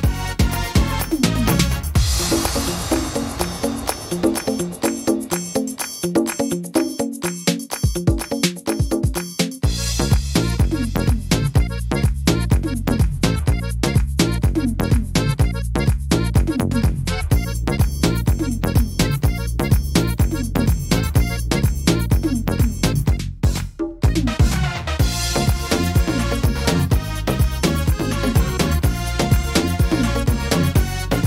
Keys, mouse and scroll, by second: 1.0 ctrl+r, 1.7 ctrl+r, 2.6 ctrl+r, 3.6 ctrl+r, 4.5 middle click, 5.9 ctrl+r, 6.7 ctrl+r, 7.8 ctrl+r, 8.3 ctrl+r, 9.2 middle click, 9.7 scroll down 1, 10.1 shift+middle click, 11.1 right click, 12.0 shift+right click, 12.7 right click, 13.0 middle click, 14.0 shift+right click, 14.8 click, 16.0 middle click, 17.5 right click, 18.3 click, 20.4 right click, 21.1 right click, 22.1 shift+right click, 22.2 shift+right click, 22.8 right click, 23.3 middle click, 24.6 shift+right click, 25.2 shift+right click, 25.6 shift+right click, 26.0 middle click, 27.3 click, 28.4 middle click, 28.8-29.2 scroll down 5, 29.4 middle click, 30.2-30.6 scroll down 1, 30.7 shift+middle click.